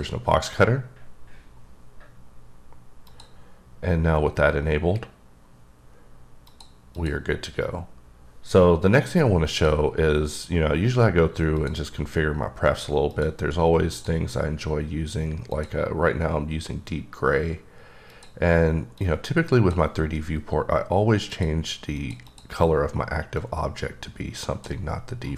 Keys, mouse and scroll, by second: 3.1 click, 6.4 click, 6.9 click, 9.5 click, 11.6 click, 13.1 click, 13.9 click, 15.7 click, 18.1 click, 19.0 click, 21.3 click, 22.0 click, 22.3 double click, 23.4-24.9 drag, 25.2-25.3 scroll down 9.